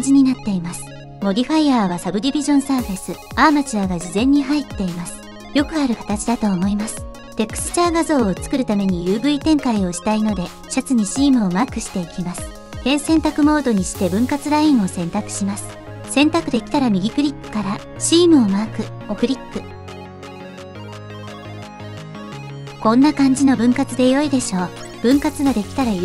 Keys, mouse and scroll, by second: 2.1 click, 3.0 click, 3.7 click, 4.2 click, 4.8 click, 6.9 click, 10.1 click, 10.7 click, 12.4 Tab, 12.8 2, 16.8 middle click, 17.1 right click, 21.5-22.3 right drag, 22.4 click.